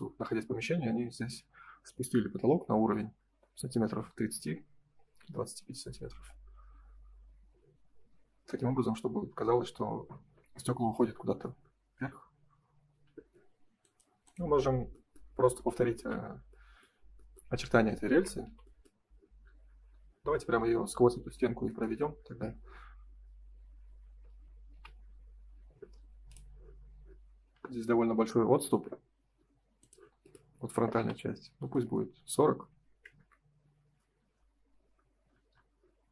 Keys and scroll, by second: 15.8 ctrl+s, 23.5 space, 25.6 space, 33.1 Return.